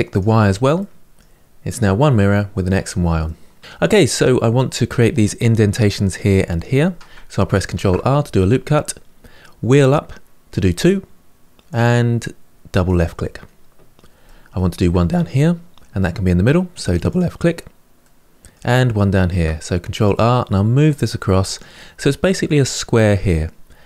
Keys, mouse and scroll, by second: 0.5-3.6 middle drag, 3.6-4.2 scroll up 1, 7.5 ctrl+r, 14.0 middle click, 14.8 ctrl+r, 17.8-19.0 middle drag, 19.0 ctrl+r, 21.5-23.8 middle drag.